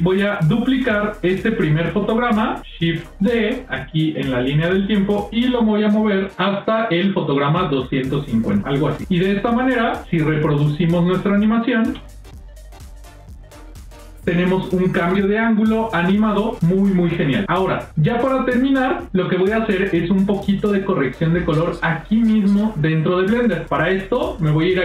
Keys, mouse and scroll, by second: 1.1 click, 1.8 click, 3.0 shift+d, 9.9 click, 11.7 space, 19.5 space.